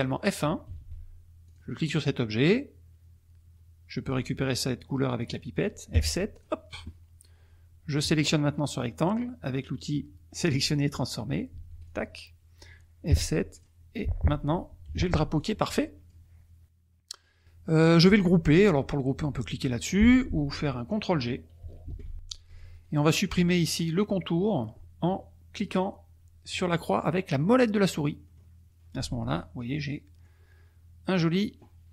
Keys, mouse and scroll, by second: 0.7 F1, 1.4 click, 5.9 F7, 6.3 click, 11.5 F1, 11.8 click, 13.1 F7, 13.5 click, 14.8 F1, 15.4 click, 21.8 ctrl+g, 28.2-30.4 middle drag.